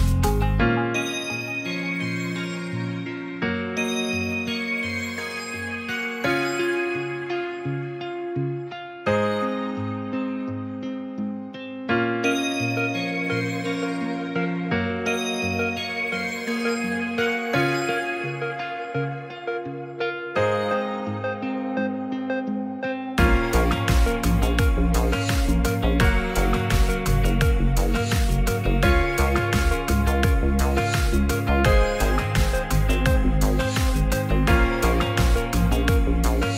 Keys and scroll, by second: 1.8 ctrl+v.